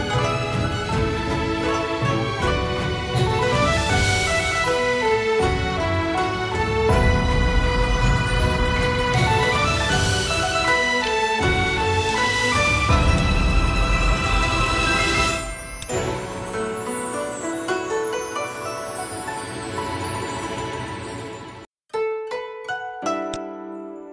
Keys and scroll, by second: 1.3 p, 11.3 v, 21.8 v, 23.1 p.